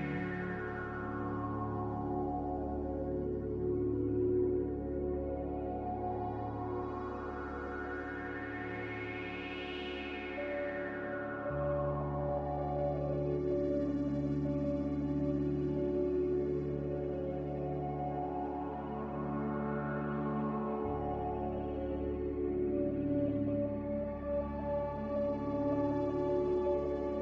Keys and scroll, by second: 0.2-0.9 typing, 2.9-3.6 typing, 5.4-6.2 typing, 7.4 n, 8.4-9.3 typing, 11.0 3, 14.0 2.